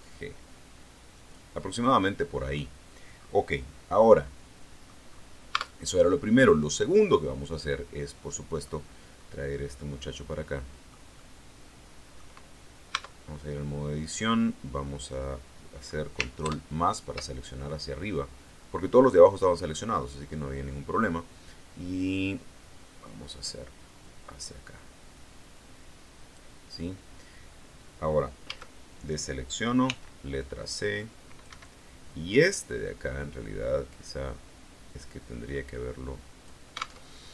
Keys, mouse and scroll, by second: 1.0 click, 1.8-2.1 scroll down 1, 2.4-2.7 scroll up 2, 3.0-3.4 scroll down 2, 3.4-5.0 middle drag, 5.0-5.4 scroll up 2, 5.4 Tab, 6.5 right click, 7.1-8.8 middle drag, 9.0-9.6 scroll up 4, 9.7-11.0 middle drag, 11.0-12.2 middle drag, 12.9 Tab, 16.4 ctrl+KP_Add, 23.4-26.4 drag, 28.4 a, 29.8 c, 30.3-31.6 drag, 31.4 Escape, 32.3-36.6 drag, 37.0 alt+Tab.